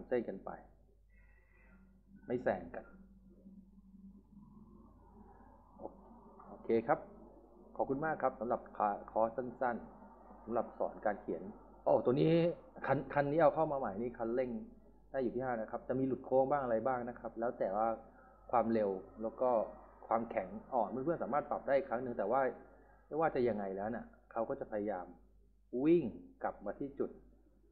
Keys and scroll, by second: 0.0 s, 19.1-19.9 typing, 21.6-22.4 typing, 26.6 s, 26.9 d.